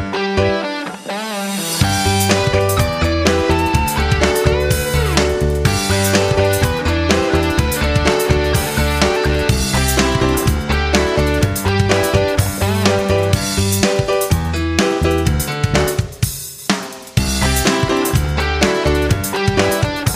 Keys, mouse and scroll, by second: 1.0-6.6 shift+drag, 7.1 F9, 8.3-10.5 drag, 11.1-14.5 ctrl+shift+drag, 14.5 F9, 14.8-20.1 drag, 20.0 Delete.